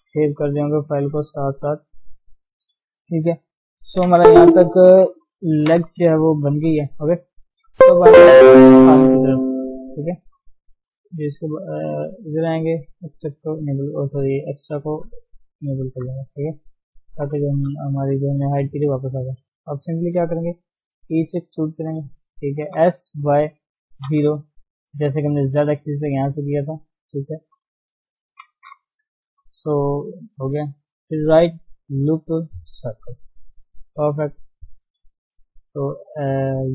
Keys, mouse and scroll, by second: 0.2 ctrl+shift+s, 1.1 ctrl+shift+s, 1.4 ctrl+shift+s, 2.0 ctrl+shift+s, 2.3-2.9 scroll down 3, 2.9-3.9 scroll down 5, 6.7 scroll up 1, 6.9 scroll down 2, 7.0-8.6 scroll up 3, 7.4 shift+middle click, 11.2 click, 13.0 click, 13.6 shift+middle click, 13.7 scroll up 1, 14.8 click, 15.1 click, 15.4 Tab, 15.7-16.4 scroll up 1, 16.4 shift+middle click, 16.7-17.1 shift+scroll up 2, 17.6 click, 18.4 shift+z, 18.7 shift+middle click, 18.9 scroll down 2, 19.4 shift+middle click, 19.6-20.2 scroll up 1, 20.2 shift+middle click, 21.0 e, 25.6-26.1 scroll down 5, 26.1-28.4 middle drag, 28.4 KP_1, 28.6-29.0 scroll up 1, 29.0 shift+middle click, 29.4 shift+z, 29.7 scroll up 2, 29.9 scroll down 1, 30.0 middle click, 30.2 middle click, 30.9-32.9 middle drag, 32.9-33.9 right drag, 33.9 KP_3, 35.2 shift+z, 35.5-36.7 shift+middle drag.